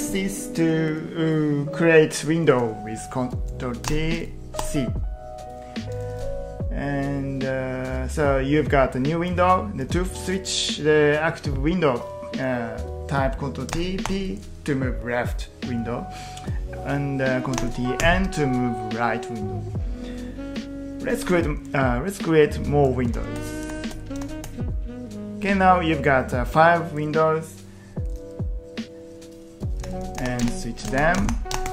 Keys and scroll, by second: 3.9 ctrl+t, 4.6 c, 13.7 ctrl+t, 14.1 p, 17.6 ctrl+t, 23.1 ctrl+t, 23.7 ctrl+t, 24.3 ctrl+t, 29.8 ctrl+t, 30.2 ctrl+t, 30.3 ctrl+p, 31.2 ctrl+t, 31.6 ctrl+t.